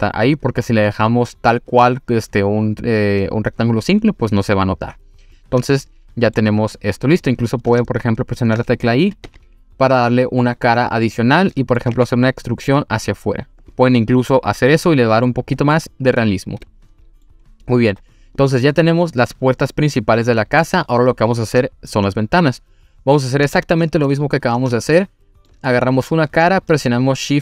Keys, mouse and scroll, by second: 5.4-6.4 middle drag, 7.3-7.8 scroll up 2, 7.9 shift+middle click, 9.3 i, 11.2 click, 11.5 middle drag, 11.9 e, 13.6 click, 15.2-15.7 middle drag, 16.6-17.3 middle drag, 17.5 scroll down 2, 18.4 click, 18.4 scroll down 4, 19.1-20.6 middle drag, 23.5-24.1 scroll up 1, 24.1 click, 24.8 shift+middle click.